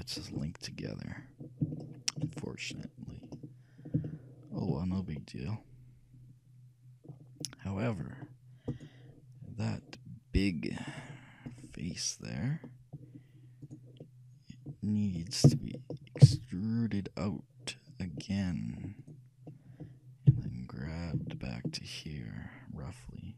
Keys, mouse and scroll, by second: 0.4-7.2 middle drag, 7.3 click, 7.3-9.2 middle drag, 7.3 right click, 8.8-10.8 right drag, 11.0-12.9 drag, 11.6-13.2 right drag, 12.7-13.8 middle drag, 13.8-15.3 right drag, 15.3 middle click, 16.4 e, 19.6-21.6 middle drag, 20.4 g.